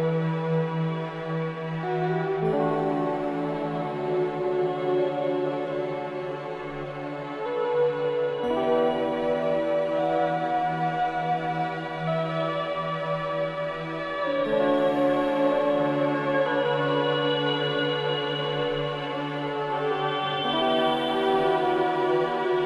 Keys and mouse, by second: 0.6-3.4 drag, 4.1 Tab, 5.7-6.8 drag, 5.7-6.8 right drag, 6.9 click, 7.1 Tab, 8.9 Tab, 9.4 Tab, 10.7 `, 10.9 `, 12.3-12.8 shift+drag, 16.5 Tab, 18.7 Tab, 19.3 Tab.